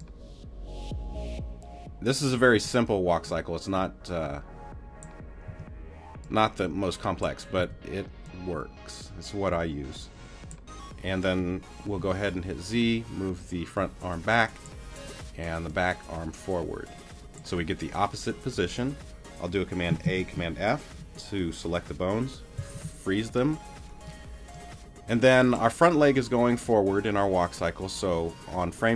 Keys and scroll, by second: 2.5 t, 5.5 t, 7.6 t, 11.1 z, 20.0 super+a, 22.6 super+f.